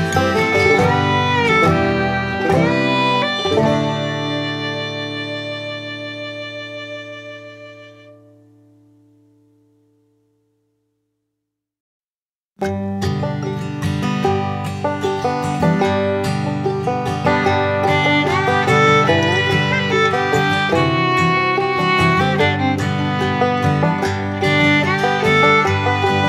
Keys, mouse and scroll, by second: 3.8 Left, 5.2 click, 7.8-17.2 drag, 17.5 click, 17.6 ctrl+z, 19.1-21.3 shift+drag, 23.2 Up, 25.9 click.